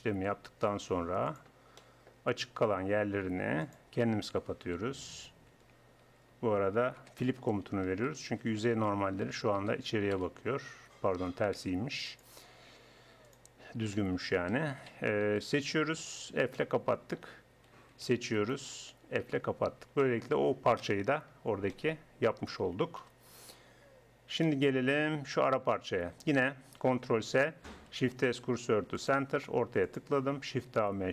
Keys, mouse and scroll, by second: 0.8 Tab, 2.3 Tab, 4.4 a, 6.1 ctrl+n, 7.0 space, 9.8 Down, 11.6 space, 14.5 a, 16.3 f, 17.7 a, 19.3 f, 19.7 Tab, 20.8 KP_1, 23.0 KP_1, 27.0 ctrl+s, 27.9 shift+s, 30.5 shift+a.